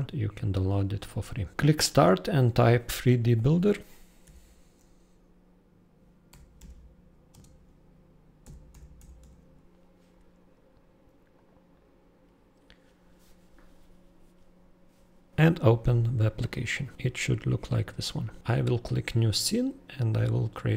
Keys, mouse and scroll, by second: 6.3 super+3, 6.5 super+d, 7.3 super+space, 8.4 super+b, 8.7 super+u, 8.9 super+i, 9.1 super+p, 11.3 click, 20.0 super+click.